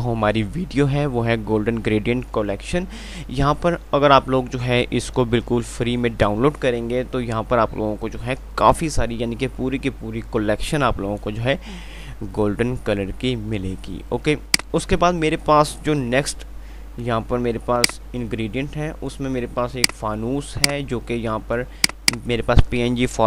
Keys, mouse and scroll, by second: 14.8 click, 16.3 F3, 20.0 click, 20.5 F2, 22.0 click.